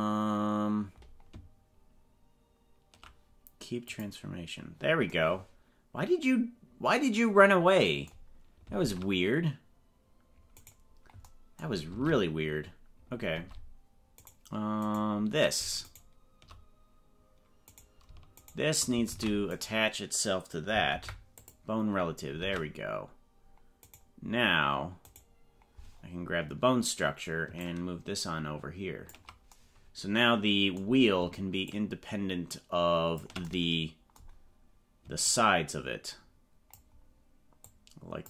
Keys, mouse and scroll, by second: 0.0 click, 4.2 click, 8.8 ctrl+Tab, 10.6 right click, 12.0 ctrl+Tab, 13.4 ctrl+Tab, 14.8 right click, 15.8 shift+right click, 17.6 right click, 18.4 shift+right click, 19.0 ctrl+Tab, 19.5 right click, 20.8 ctrl+p, 22.3 ctrl+Tab, 23.8 right click, 25.2 right click, 26.0-26.6 scroll down 5, 27.6-29.2 ctrl+drag, 31.6-33.3 ctrl+drag, 35.3-36.7 ctrl+drag, 37.7 ctrl+click.